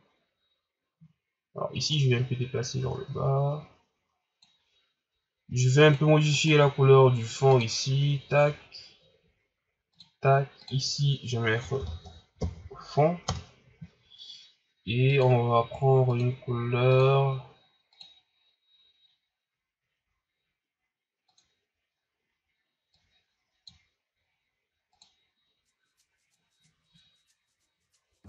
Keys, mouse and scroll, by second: 1.9-5.0 drag, 5.8 right click, 6.3 right click, 7.9 click, 9.9-13.8 drag, 15.1 click.